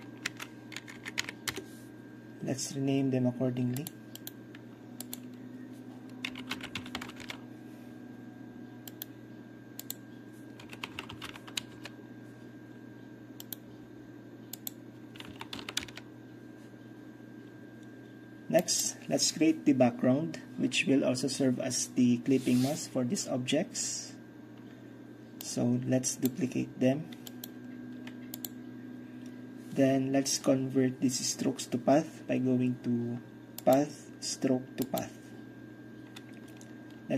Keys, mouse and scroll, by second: 0.0-1.3 typing, 1.5 Return, 3.9-5.1 drag, 6.4-7.1 typing, 7.3 Return, 9.0-9.3 right drag, 9.9 click, 10.7-12.3 typing, 13.5-13.9 right drag, 14.6-15.2 drag, 15.3-16.6 typing, 15.9 Return, 18.7 click, 25.5-30.2 drag, 33.6-34.6 drag, 34.6 middle click, 34.9 click.